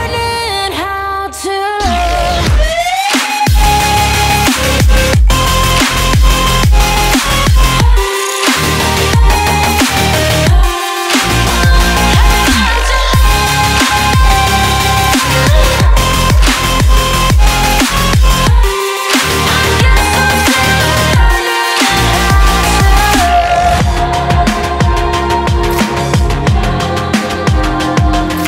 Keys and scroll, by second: 22.9 ctrl+shift+z.